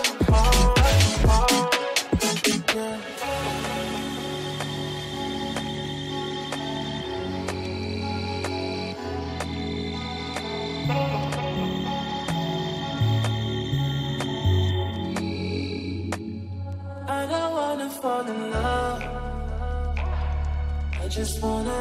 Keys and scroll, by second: 0.6 shift+F2, 0.9 Escape, 1.6 F4, 1.8 Escape, 6.1 shift+F2, 8.1 ctrl+z, 8.7 shift+F2, 11.0 shift+Page_Down, 11.3 Escape, 18.4 ctrl+z.